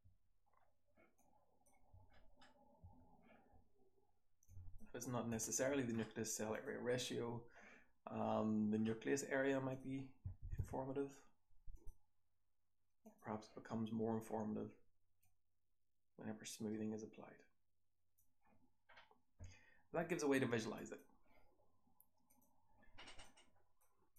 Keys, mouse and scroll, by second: 0.4-2.1 scroll down 2, 1.1 click, 1.8 h, 2.1-4.3 scroll up 2, 2.7 h, 7.3-11.8 scroll down 2, 11.8-14.9 scroll down 1, 14.9-16.6 scroll down 1, 16.6-17.4 scroll down 1, 17.4-22.3 scroll down 1, 23.2-23.7 drag, 24.1 click.